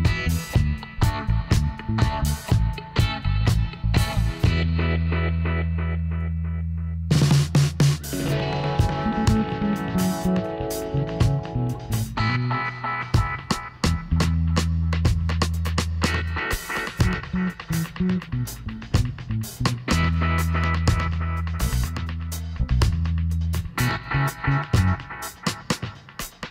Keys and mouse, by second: 4.3 middle click, 6.7 a, 7.0 a, 8.0 w, 9.7-11.4 middle drag, 11.1 KP_7, 12.0-14.4 drag, 14.8-17.4 drag, 17.4 e, 21.0-24.1 middle drag, 25.3-26.5 drag.